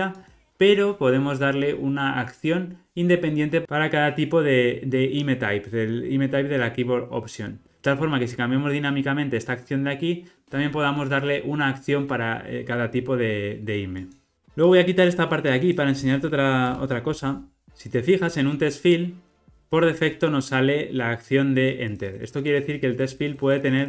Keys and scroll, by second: 14.3 alt+super+[, 17.2 ctrl+r.